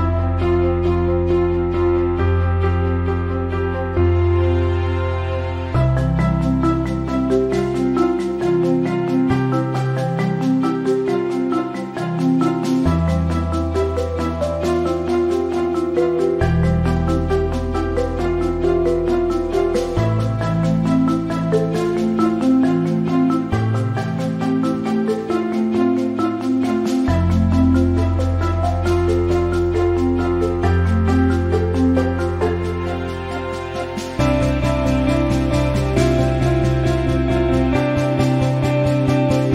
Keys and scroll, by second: 11.1-12.3 typing, 23.4 t, 27.8-28.8 typing.